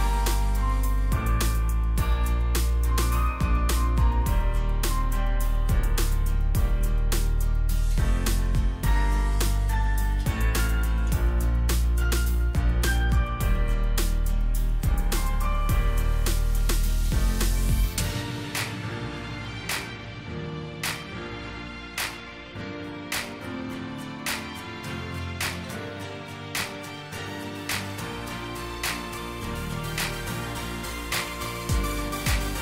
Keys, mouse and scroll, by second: 1.9-2.2 alt+scroll down 1, 2.2 alt+shift+click, 7.0 ctrl+z, 7.7 double click, 12.1 alt+shift+click, 14.4-14.9 alt+scroll up 1, 15.8 scroll up 1, 21.5-21.8 alt+scroll up 1, 22.3 alt+shift+click, 28.8-30.1 scroll up 1.